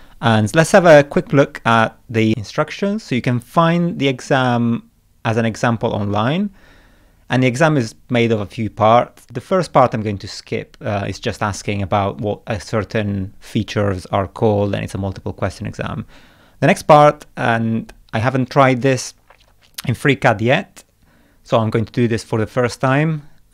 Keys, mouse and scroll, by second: 1.4-1.7 scroll down 2, 2.2-3.0 scroll down 6, 3.8 scroll up 2, 4.6 scroll up 1, 5.6-6.2 scroll down 2.